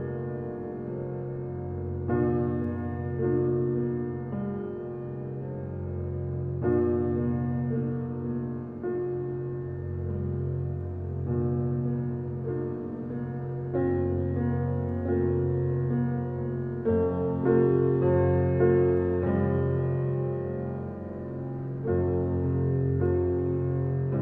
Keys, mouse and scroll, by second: 2.9 click, 3.5 Escape, 4.6 click, 7.3 scroll down 1, 7.7 alt+click, 8.2 alt+middle click, 8.6 alt+right click, 9.0 alt+middle click, 10.7-12.5 drag, 15.7 scroll down 1, 17.2 click, 21.6 Delete, 22.4 click, 22.7 Delete, 23.9 click.